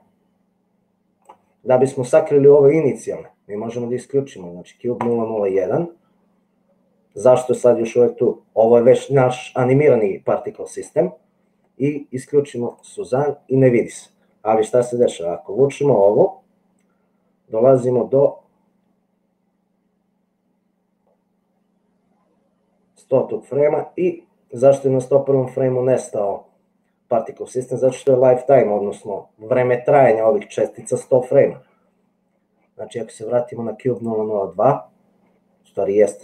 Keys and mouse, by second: 1.2 middle click, 5.1 click, 13.0 click, 15.3 click, 16.2-20.1 middle drag, 24.7-27.9 drag.